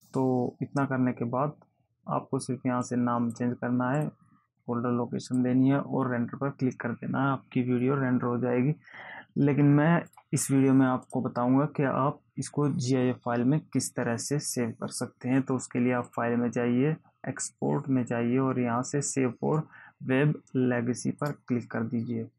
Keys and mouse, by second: 3.2 click, 5.7 click, 10.5 click, 11.4 click, 16.4 click, 21.6 click.